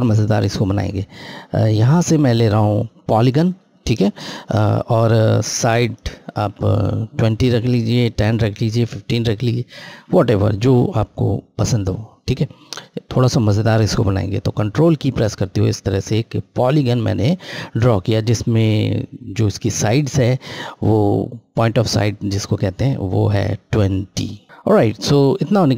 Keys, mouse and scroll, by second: 1.5 click, 1.6 click, 5.5 click, 12.1-14.0 scroll, 14.6 ctrl+Left, 24.4 click.